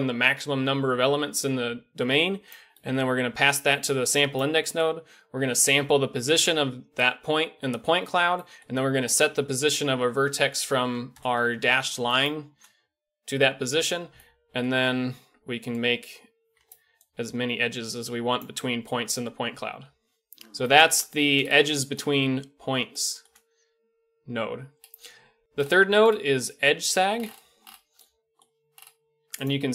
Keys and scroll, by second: 26.6 KP_Decimal.